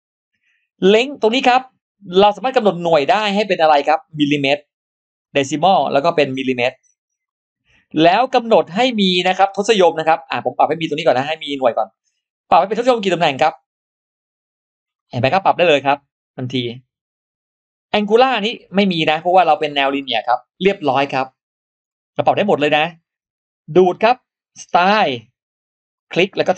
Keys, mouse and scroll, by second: 3.1 click, 5.0 click, 5.9 click, 7.1 click, 10.9 click, 12.5 click, 13.3 click, 14.8 click, 15.5 click, 18.2 click, 19.4 click, 19.7 scroll down 2, 20.6-20.9 scroll up 2, 21.2-21.6 scroll down 2, 21.7-22.0 scroll up 2, 22.8 scroll up 2, 24.8 click, 25.8 click.